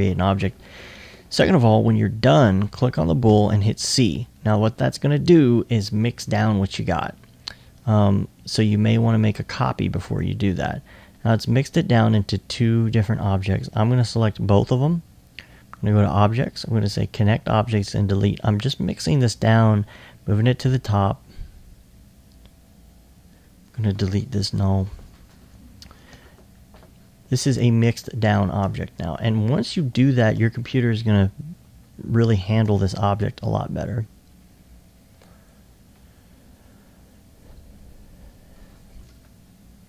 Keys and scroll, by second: 3.3 c.